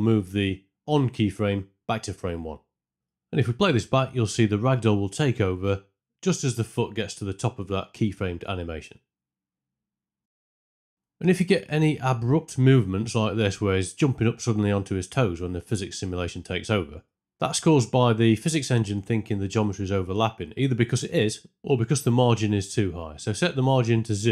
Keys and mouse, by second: 2.0 click, 3.4 click, 4.4 space, 6.8 space, 7.2 shift+Left, 7.8 space, 10.2 space, 10.7 shift+Left, 11.8 space, 13.1 space, 14.6 space, 15.9 space, 19.2 click, 23.2 click.